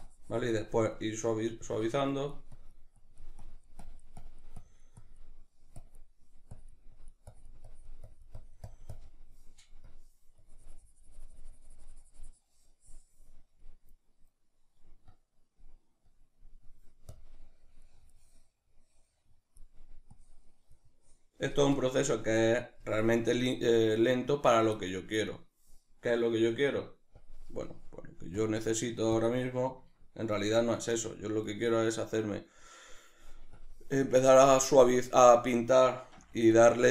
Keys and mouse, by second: 24.3-27.2 middle drag, 27.2-29.9 drag, 29.9-33.6 ctrl+middle drag, 33.6-36.6 drag, 36.2 f.